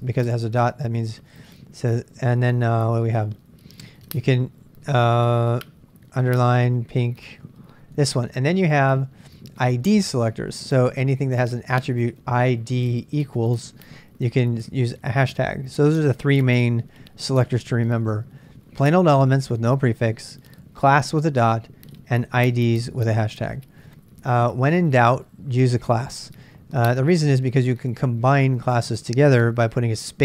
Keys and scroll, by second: 0.0-2.8 typing, 4.1-5.3 typing, 6.5 typing, 7.7-12.7 typing, 14.2-15.1 typing.